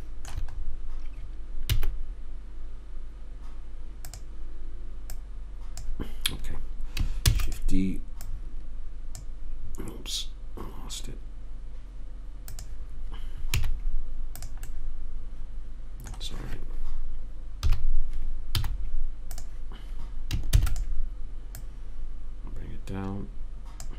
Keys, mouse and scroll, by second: 2.0 s, 5.4 click, 7.6 shift+d, 13.8 z, 18.0 KP_3, 18.9 z, 20.9 shift+d.